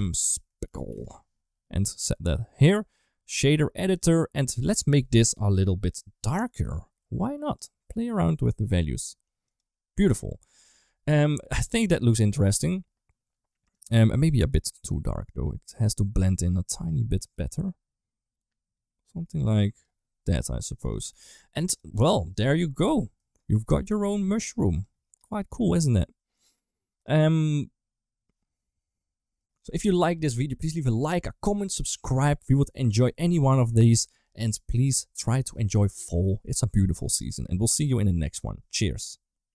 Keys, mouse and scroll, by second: 1.7 click, 3.1 click, 4.3 click, 5.4 Home, 6.4 click, 7.3 click, 13.5 right drag, 20.7 right drag, 21.4 ctrl+s, 22.7 middle drag, 23.8 KP_1, 24.5 click, 25.5 shift+middle drag.